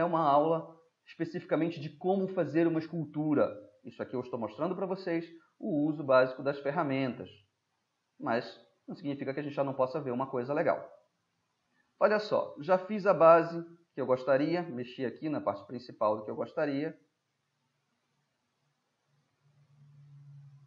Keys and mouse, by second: 1.2-1.9 middle drag, 1.9 drag, 2.0-2.5 middle drag, 2.5-3.1 drag, 5.8-8.7 middle drag, 8.7-9.4 middle drag, 9.9-10.8 middle drag, 11.9-12.9 middle drag, 13.4-14.2 middle drag, 17.1-19.4 drag, 19.4-20.6 middle drag.